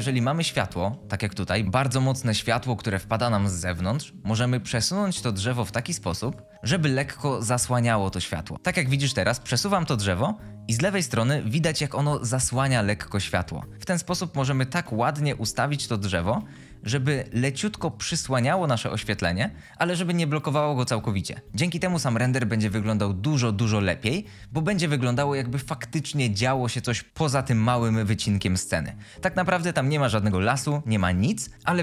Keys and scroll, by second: 1.6 ctrl+z, 1.6 t, 4.5-4.9 typing, 6.3-7.0 typing, 9.2-9.5 typing, 13.5-14.2 typing, 16.0-16.8 typing.